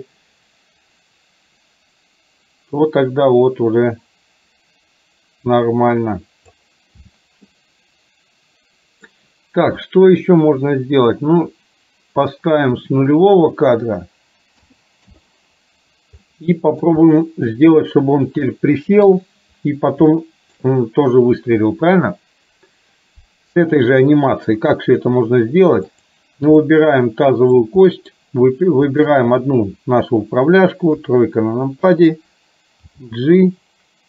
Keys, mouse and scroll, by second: 7.5-9.2 middle drag, 13.5-15.2 drag, 16.3-17.0 middle drag, 17.2-17.5 shift+middle drag, 19.0 KP_3, 20.3-20.7 shift+middle drag, 26.2 click, 26.7-27.7 middle drag, 27.9 middle drag, 29.0 shift+drag, 30.9 KP_3, 32.9 g.